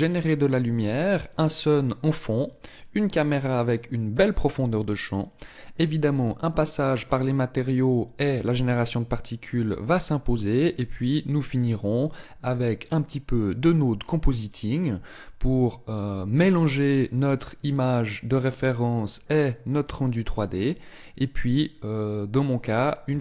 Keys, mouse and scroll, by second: 1.7 right click, 11.5 click.